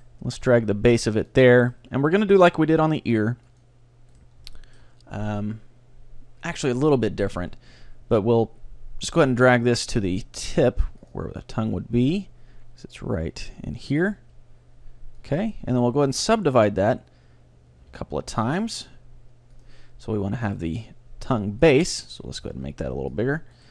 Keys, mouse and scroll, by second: 0.1-3.7 right drag, 0.2 g, 1.4-3.1 drag, 2.7 g, 3.7 click, 4.0 click, 4.0 right click, 4.5-6.4 middle drag, 5.2 click, 5.2 right click, 7.4 g, 11.2-13.1 drag, 14.3 g, 15.4-17.1 drag, 15.7-17.9 right drag, 17.9 w, 19.6-21.3 drag, 20.5-23.5 right drag, 20.7 g, 21.0 middle click, 22.5 ctrl+alt+s, 23.3 click, 23.3 middle click.